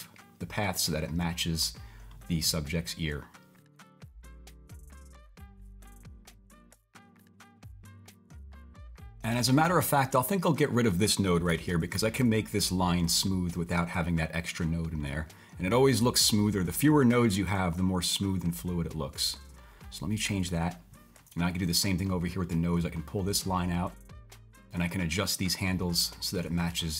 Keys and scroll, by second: 7.6-9.3 typing, 11.5 BackSpace.